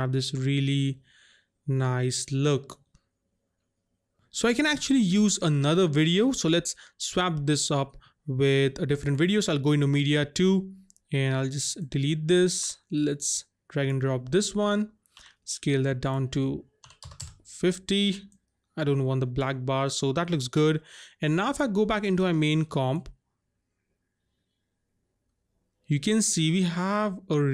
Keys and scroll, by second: 12.6 Delete, 15.2 s, 16.9 KP_5, 17.0 KP_0, 17.2 Return.